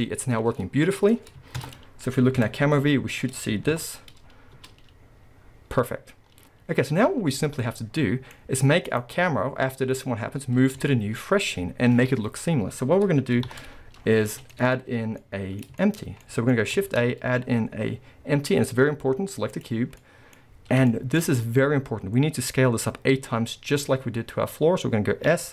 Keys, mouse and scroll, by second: 0.3-0.6 scroll down 1, 1.7 KP_0, 3.2-3.7 scroll up 2, 3.7 shift+Left, 4.2-4.6 scroll up 2, 4.6 space, 5.0 scroll down 1, 7.1-7.4 scroll down 1, 7.4-8.4 middle drag, 8.4-8.9 scroll down 2, 8.9 click, 10.9-25.5 shift+middle drag, 11.3-12.2 scroll up 1, 13.5 shift+Left, 14.0 scroll down 1, 14.3 alt+a, 14.8-15.2 scroll up 1, 16.9 shift+a, 25.3 s.